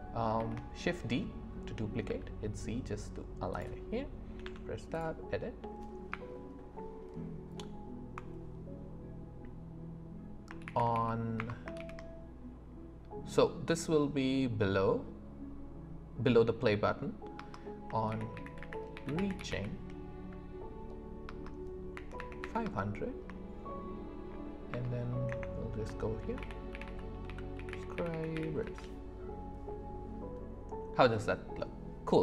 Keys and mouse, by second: 0.4 shift+d, 2.0 z, 4.4 Tab, 6.1-11.7 typing, 17.3 space, 18.1 shift+r, 21.2 space, 21.9 KP_5, 22.6 space, 24.7 BackSpace, 25.3 Return, 26.2 shift+s.